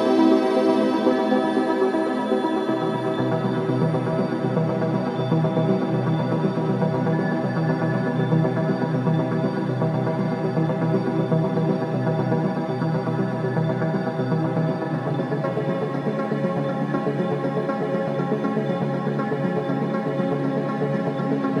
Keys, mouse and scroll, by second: 0.1 ctrl+s, 1.5 space, 1.6 click, 2.5 scroll down 1, 2.7 space, 3.4 alt+click, 3.9 scroll down 1, 4.3 alt+click, 5.2 click, 8.5 scroll down 1, 8.8 alt+click, 10.3 click, 12.6 h, 13.0 scroll down 1, 13.3 alt+click, 13.6 click, 14.8 ctrl+s, 15.2 scroll up 1, 15.5 alt+middle click, 15.9 alt+click, 16.8 alt+right click, 17.1 alt+click, 17.5 alt+right click, 17.7 alt+right click, 18.0 alt+click, 18.2 alt+middle click, 19.0 alt+right click, 19.2 alt+middle click, 19.3 alt+middle click, 19.6 alt+right click, 20.0-21.6 alt+drag.